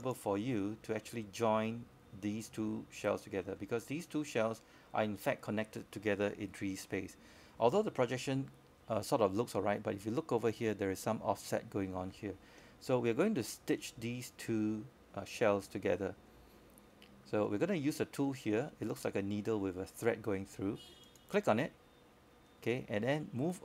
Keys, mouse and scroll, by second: 1.8-4.0 drag, 4.3 alt+middle click, 6.3-9.6 drag, 10.1 scroll down 1, 10.4 alt+middle click, 11.4 alt+middle click, 13.7-18.1 drag, 23.1 scroll down 1, 23.2-23.6 scroll up 1.